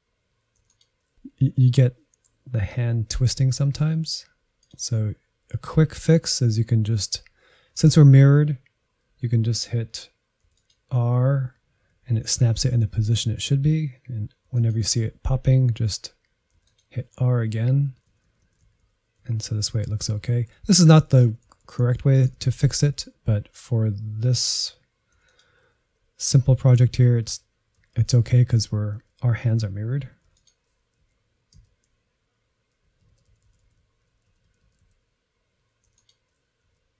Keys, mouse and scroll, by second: 0.0-0.5 scroll down 7, 0.5-1.5 scroll up 4, 1.5-2.9 scroll down 1, 2.9 Left, 3.1 Left, 3.5 Right, 3.8 Right, 4.6-5.6 drag, 5.6 Left, 10.5 r, 12.0 Left, 12.5 Left, 14.4 r, 15.5 Left, 16.5 r, 17.5 Left, 17.9 Right, 18.1-18.7 Right, 18.9 Right, 19.3 Right, 19.5 Right, 19.9 Right, 20.1 Left, 20.3 Left, 20.4 Left, 20.6 Left, 20.8 Left, 20.9 Left, 21.1 Left, 21.3-22.1 Left, 22.3 Left, 22.4 Left, 22.6 Left, 22.8 Left, 23.4-24.3 scroll down 3, 24.3 shift+middle click, 25.2 r, 26.4 Left, 26.8 Left, 27.8 Right, 28.1 Right, 28.2 Right, 28.4 Right, 28.6 Right, 29.0 Right, 30.2 r, 31.1 Right, 31.6 Right, 32.9 Right, 33.2 Left, 33.3-33.9 Left, 34.1 Left, 34.3-34.9 Right, 35.9 r, 36.7 Right.